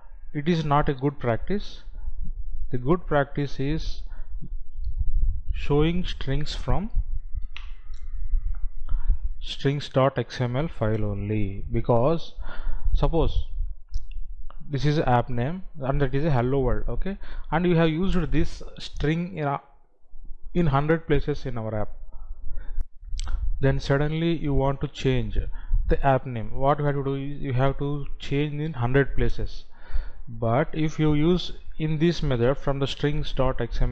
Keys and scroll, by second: 22.9 F9.